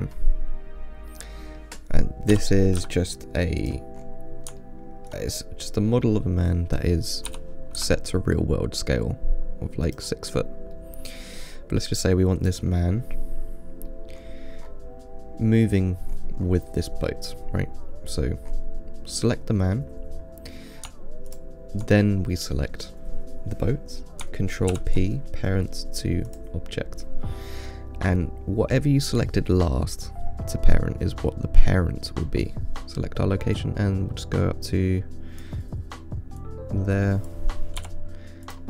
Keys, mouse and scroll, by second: 1.1 scroll down 2, 1.4-2.6 middle drag, 2.6 g, 4.3 scroll up 5, 4.9-6.0 shift+middle drag, 6.0 scroll down 2, 6.3-7.6 middle drag, 7.6 g, 10.6-11.0 scroll up 4, 11.0-12.3 middle drag, 12.3 click, 14.1-16.4 scroll down 2, 14.2 middle drag, 16.4-16.7 scroll up 2, 16.7 scroll down 2, 17.0-18.8 middle drag, 18.8-21.6 scroll up 5, 21.6 shift+click, 25.0 ctrl+p, 29.3-29.9 middle drag, 29.9 scroll down 4, 31.0-32.8 drag, 32.8 ctrl+z, 33.8-36.7 drag.